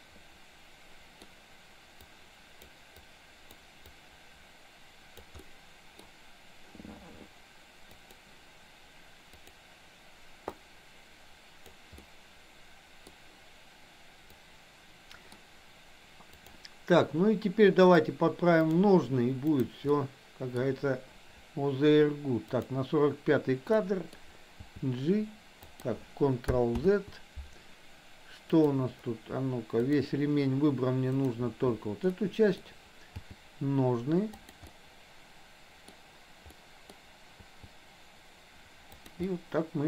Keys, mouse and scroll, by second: 2.1 click, 3.1 click, 3.8-5.3 drag, 5.5 middle click, 9.5 click, 10.6-11.8 drag, 12.1-13.1 middle drag, 14.5 click, 15.0 middle click, 16.2 click, 18.0-18.7 drag, 20.0-20.6 middle drag, 22.6 click, 23.7-24.2 middle drag, 24.6 g, 26.8 ctrl+z, 28.6 click, 29.7 click, 31.1 click, 32.1 middle click, 33.1 g, 34.6-36.0 middle drag, 36.5-36.8 middle drag, 37.5 g, 39.3-39.8 middle drag.